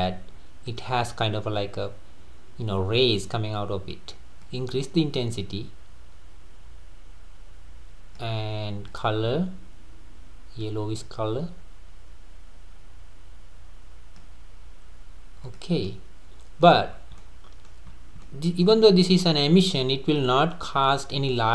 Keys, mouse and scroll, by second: 0.7-3.7 drag, 4.4-7.5 drag, 8.9 click, 15.4 click, 15.9-16.9 middle drag, 16.9 scroll up 2, 17.2-17.7 middle drag, 17.7-18.2 scroll up 4, 18.2-18.9 middle drag, 18.9 scroll down 2, 19.3-21.1 middle drag, 21.1-21.5 scroll down 2.